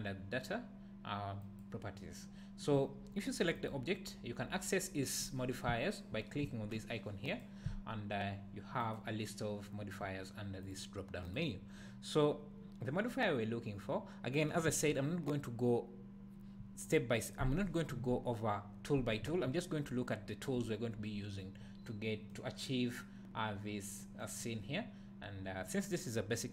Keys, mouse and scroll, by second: 7.3 click, 8.8-10.6 drag, 11.2-22.3 drag, 22.3-26.5 middle drag, 24.3-24.7 scroll down 2, 24.7-25.4 scroll up 2, 25.4-26.5 scroll up 1.